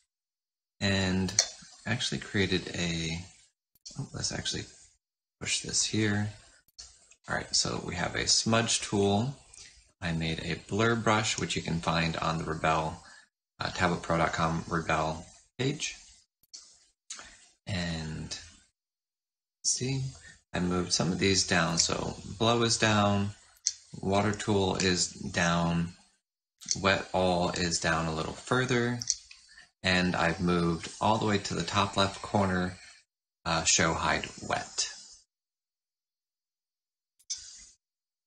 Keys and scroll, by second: 0.0 typing, 1.2 F8, 3.6 s, 6.6 s, 16.3 s, 21.3-22.1 typing, 23.3-24.0 typing, 26.1-26.9 typing, 28.6-29.3 typing, 31.3-32.0 typing, 33.6-34.4 typing, 37.1 F4.